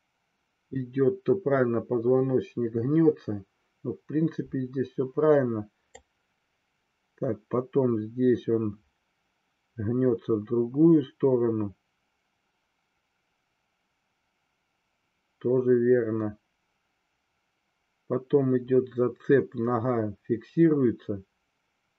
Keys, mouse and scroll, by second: 6.0-21.9 drag.